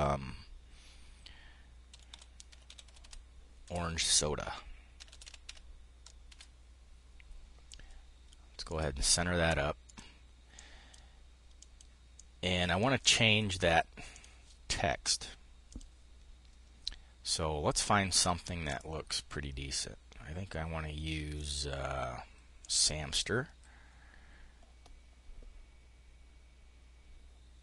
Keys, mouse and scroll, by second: 1.2-3.0 typing, 3.1 Return, 4.2-5.9 typing, 8.2 click, 9.4 click, 10.1-11.1 drag, 11.1 click, 15.2 click, 17.4-21.1 drag, 22.1 click.